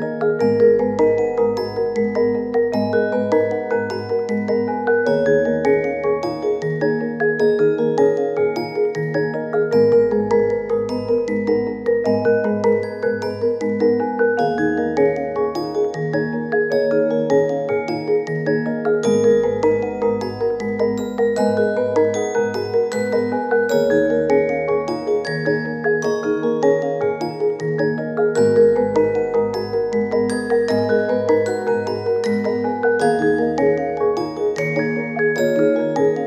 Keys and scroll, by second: 2.4 i, 3.7 k, 13.8 ctrl+z, 14.8 i, 15.7 k, 20.4 ctrl+z, 28.6 i, 29.7-31.4 typing, 32.5-33.5 typing.